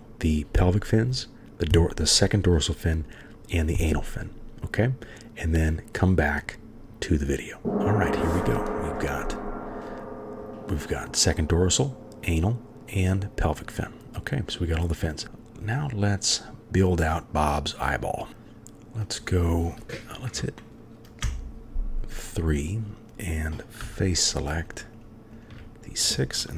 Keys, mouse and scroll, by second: 21.2 3, 23.9 shift+click, 24.6 shift+click, 25.0-25.6 shift+drag.